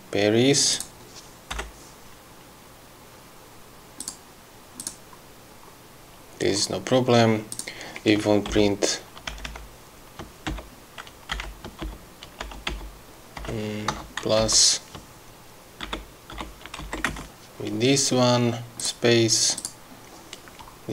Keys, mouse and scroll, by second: 0.9 click, 1.7 BackSpace, 4.2 click, 5.0 click, 7.7 click, 9.5 shift+BackSpace, 11.5 shift+BackSpace, 12.6 shift+BackSpace, 13.6 BackSpace, 14.1 KP_Add, 14.6 Left, 17.0 shift+Left, 17.3 shift+space, 19.0 click, 19.8 click.